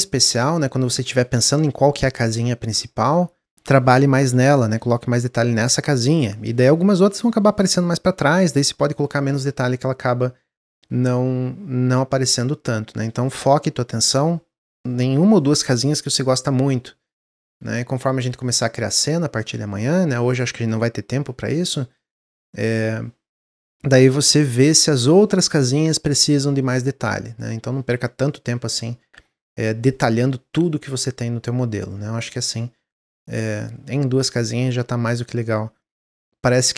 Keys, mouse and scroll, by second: 30.8-32.6 middle drag, 32.6 scroll down 3, 33.0-35.9 middle drag, 35.9-36.4 scroll up 1, 36.4-36.7 middle drag.